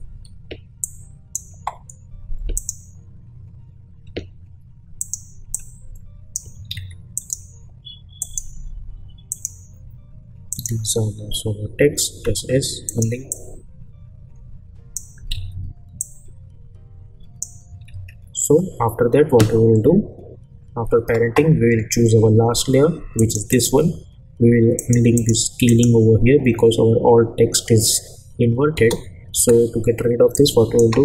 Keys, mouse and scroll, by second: 0.0 space, 0.8-1.4 drag, 4.0 s, 5.0 click, 6.7 ctrl+z, 7.1 click, 11.0 r, 12.1 s, 12.9-15.2 drag, 15.3 ctrl+z, 16.0-17.5 drag, 17.9 ctrl+z, 23.2 click, 28.7 space, 30.3-30.9 drag.